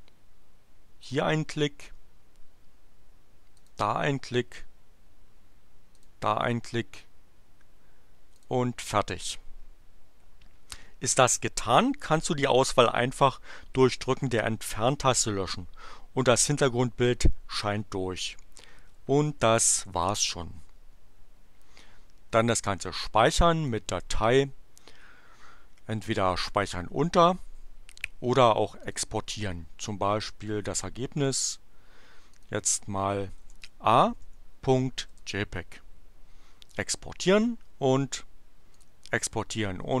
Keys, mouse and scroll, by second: 1.0 click, 3.6 click, 6.0 click, 8.2 click, 19.8 Delete, 23.6 click, 28.8 click, 31.2 click, 32.3 click, 33.4 BackSpace, 34.2 a, 35.1 Return, 38.8 click.